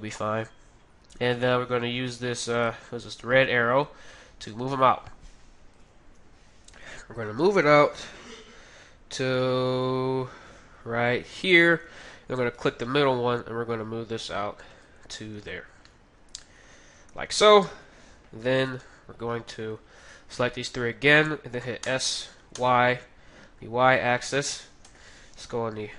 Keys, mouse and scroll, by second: 0.2-1.9 drag, 3.8-5.5 drag, 6.0 KP_1, 7.6 g, 12.4-14.8 right drag, 13.0 g, 15.0-18.2 middle drag, 17.7 KP_3, 18.5-20.7 middle drag, 20.0 right click, 21.1 right click, 21.8 right click, 21.8 s, 24.9 KP_3.